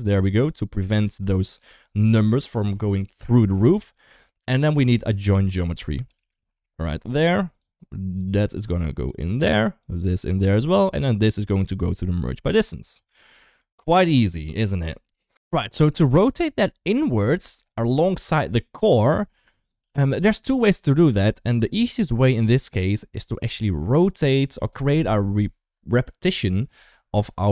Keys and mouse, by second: 0.6 g, 4.4 click, 4.9 shift+a, 8.0 click, 8.2-8.9 drag, 9.6 click, 9.8-10.3 drag, 11.1 click, 11.4 click, 12.7 click, 13.5-13.8 drag, 14.0 g, 14.9 click, 15.4 ctrl+x, 15.8 shift+middle click, 17.0 middle drag, 18.9 click, 20.0 g, 20.2 shift+middle click, 20.9 ctrl+s, 21.6 shift+middle click.